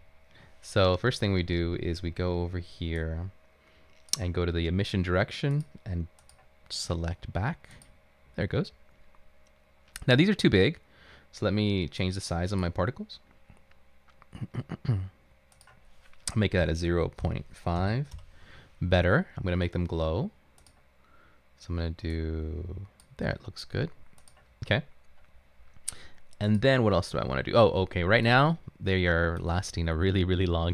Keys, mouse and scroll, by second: 16.7-18.3 typing, 23.4 click, 29.2 right click.